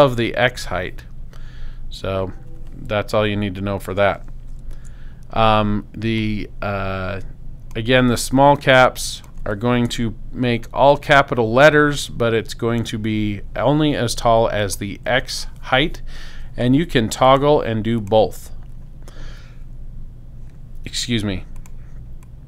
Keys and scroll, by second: 4.7 BackSpace, 9.9 BackSpace.